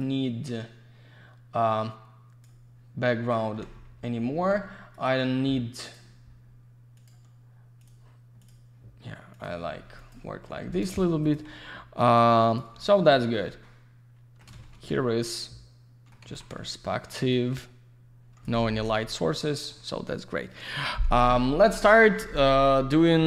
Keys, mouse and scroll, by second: 0.0 click, 3.8 F3, 4.9 click, 5.0 click, 5.8 click, 5.9 click, 7.0 click, 7.1 click, 7.8 click, 7.9 click, 8.4 click, 8.5 click, 9.3 click, 9.4 click, 10.0 click, 10.1 click, 10.2 F4, 11.0 q, 11.2 click, 11.3 click, 11.6 alt+middle click, 12.2 alt+z, 12.3 click, 12.7 middle click, 13.5 middle click, 14.9 alt+middle click, 16.2 alt+z, 16.3 click, 16.5 click, 16.6 alt+middle click, 17.2 alt+z, 17.3 click, 18.5 F4, 19.1 alt+middle click.